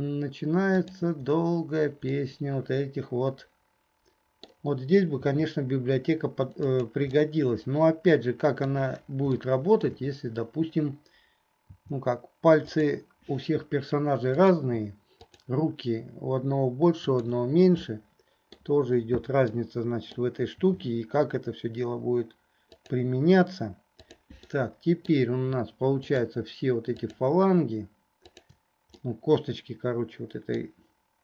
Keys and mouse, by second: 0.8 shift+click, 2.3-4.7 middle drag, 5.4 r, 7.3-8.9 middle drag, 9.6 shift+click, 9.6 shift+middle click, 9.6 shift+right click, 14.4 click, 15.4 shift+click, 17.1 shift+click, 18.0 click, 18.0 right click, 19.7 click, 19.7 right click, 20.8 r, 24.0 click, 24.6 middle click, 26.2 shift+middle click, 27.1 shift+middle click, 29.1-30.8 middle drag.